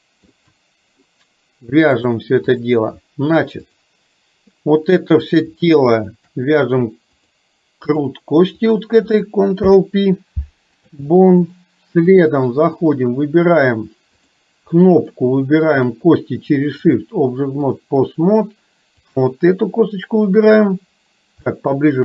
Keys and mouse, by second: 2.1 click, 3.8 click, 5.9 shift+click, 7.2 click, 9.7 ctrl+p, 12.2 click, 14.8 middle click, 17.1 click, 21.6 shift+middle click.